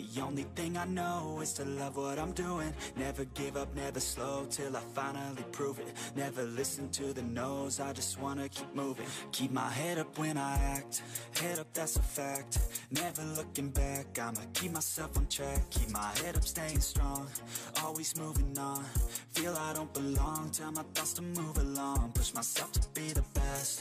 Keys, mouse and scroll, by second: 0.0 a, 0.6 g, 3.5 click, 3.7 middle click, 4.0-4.5 scroll down 2, 4.5 click, 4.9 KP_3, 5.3 scroll down 1, 5.4 shift+middle click, 5.6 shift+a, 6.3 s, 7.4 shift+middle click, 7.6 scroll up 3, 7.8 s, 8.5 shift+middle click, 8.7 scroll up 3, 8.8 shift+middle click, 9.2 g, 9.9 s, 10.4 r, 11.1 g, 11.8 click, 12.7 c, 14.0-18.6 typing, 19.8 s, 20.6 click, 21.0 g, 22.2 click, 22.4 c, 23.6-23.8 typing.